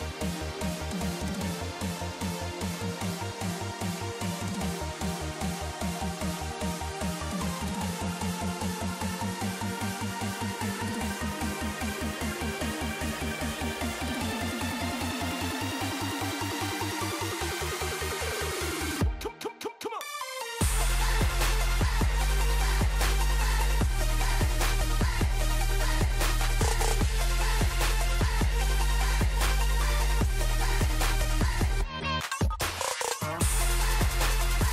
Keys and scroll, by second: 0.6 alt+shift+Down, 1.4 alt+shift+Up, 3.9 super+d, 4.1 super+r, 5.5 super+k, 8.6 super+d, 8.9 super+k, 10.3 alt+shift+Right, 11.1 alt+Left, 19.1 ⟲, 21.9 ⟲, 26.2 super+g, 26.3 super+r, 27.4 super+=, 28.4 super+g, 28.5 super+r, 31.0 super+-, 31.6 super+g, 31.7 super+r.